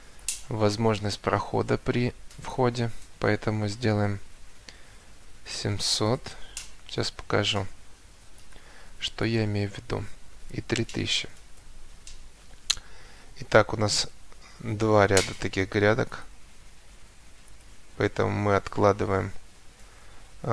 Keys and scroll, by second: 5.3 7, 5.5 0, 6.0 Return, 10.5 3, 11.5 Return, 13.6 Escape, 19.6 Escape.